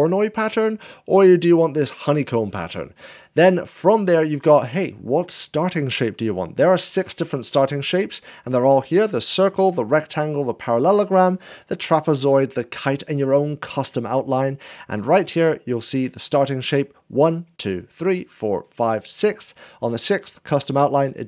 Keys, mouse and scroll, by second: 1.0-2.1 drag, 8.4 scroll down 1, 9.5-10.0 scroll down 1, 10.1 scroll down 1, 11.9 scroll down 1, 14.4 scroll up 1, 17.2-19.9 drag, 17.4-18.7 scroll down 1, 18.7-19.1 scroll up 1.